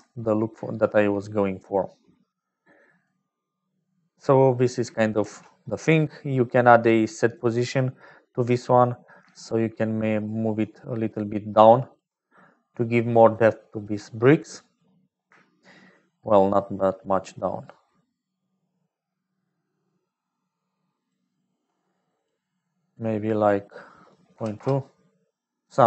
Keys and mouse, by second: 2.5 right click, 5.1 shift+a, 9.5-12.0 shift+drag, 12.7 click, 14.1 click, 14.2 middle click, 16.2-21.1 shift+drag, 22.2-25.6 drag.